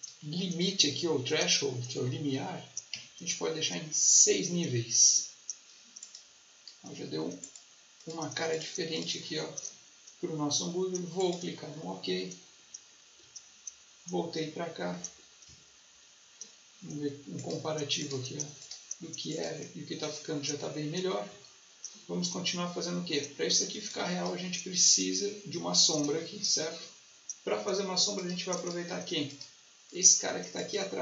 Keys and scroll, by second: 2.8 6, 15.3 ctrl+1, 23.7 space.